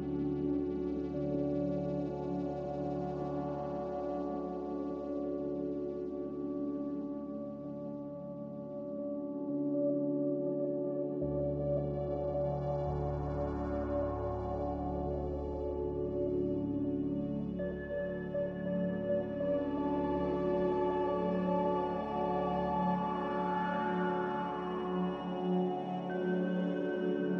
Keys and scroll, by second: 9.7 Delete, 10.5 ctrl+c, 21.2 Delete, 21.7 ctrl+v, 25.1 m, 26.0 b.